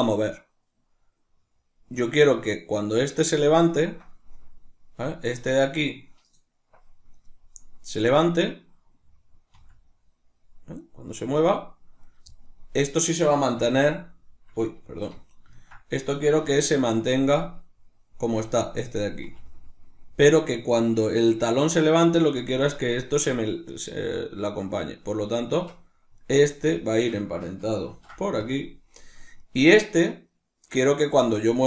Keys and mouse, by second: 2.9 right click, 8.4-12.2 middle drag, 9.6 r, 12.2 right click, 13.7 alt+q, 13.7-17.1 middle drag, 16.4 r, 17.1 right click, 19.2 r, 22.4 right click, 25.4 Tab, 26.2 right click, 26.9 shift+right click, 27.9 ctrl+p, 29.4 right click.